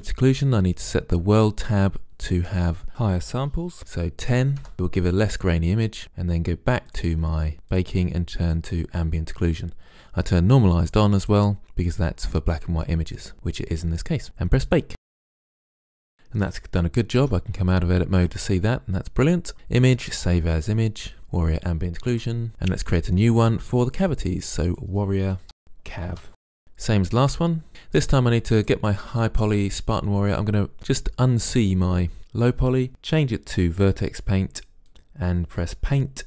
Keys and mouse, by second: 2.4-3.8 drag, 3.8 click, 6.9-9.7 drag, 11.3-12.6 drag, 14.8 click, 17.3 Tab, 19.5-20.2 drag, 22.5 drag, 23.4-25.4 drag, 25.6 r, 28.6-30.5 drag, 32.2-32.9 drag, 33.8-34.5 drag, 35.9-36.2 drag.